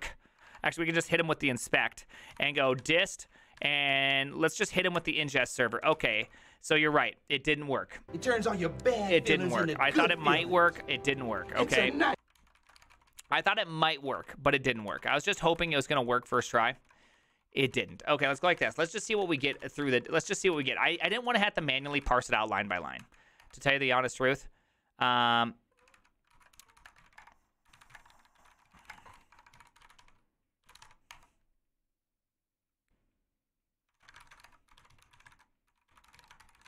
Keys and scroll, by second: 0.0-6.4 typing, 9.7 ctrl+a, 9.7-22.6 typing, 10.1 ctrl+c, 10.2 ctrl+:, 10.3 Return, 10.7 ctrl+h, 16.3 ctrl+c, 16.6 Return, 16.7 ctrl+u, 16.8 ctrl+u, 21.8 ctrl+c, 21.8 Return, 22.1 Return, 22.3 ctrl+a, 23.0 Up, 23.4 Return, 25.8 Up, 26.0 Up, 26.3-31.3 typing, 33.8-36.6 typing.